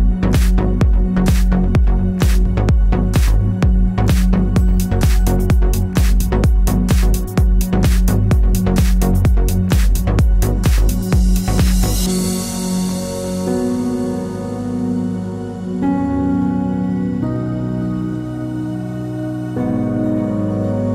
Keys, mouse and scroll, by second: 0.1 click, 0.3 click, 0.6 click, 0.9 click, 1.1 click, 1.4-2.9 middle drag, 2.3 r, 2.9 click, 2.9-7.1 middle drag, 4.3-7.1 scroll down 5, 7.1 click, 11.7-14.8 middle drag, 14.8 click, 16.6 alt+d, 20.0 middle click.